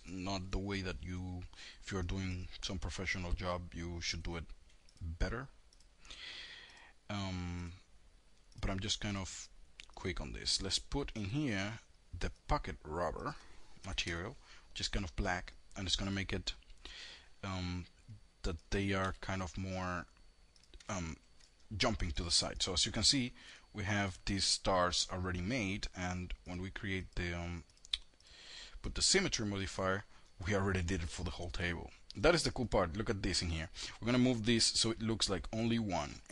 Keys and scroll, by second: 13.0 KP_Enter, 18.2 v, 21.7 v.